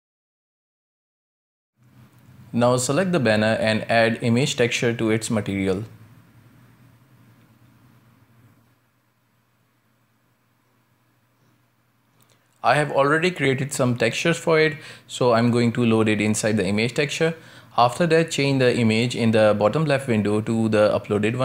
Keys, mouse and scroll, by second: 0.0-0.4 shift+middle drag, 0.4 space, 0.9 shift+middle click, 1.2 scroll down 1, 1.7 shift+middle click, 2.0 space, 5.2 right click, 6.2 KP_Decimal, 7.1-7.9 middle drag, 7.9 ctrl+space, 8.5 scroll down 3, 8.8 middle click, 9.4 scroll up 2, 9.7-10.0 middle drag, 10.0 shift+a, 13.9 drag, 16.0 click, 17.1-17.8 scroll up 4, 17.8-19.0 middle drag, 19.0-20.4 drag, 20.4-21.2 scroll down 6, 21.2 shift+middle click.